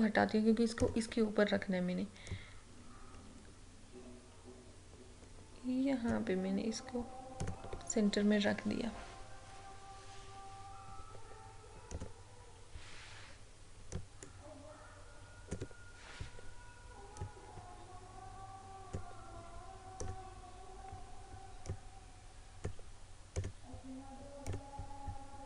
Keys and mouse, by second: 12.0-25.4 drag.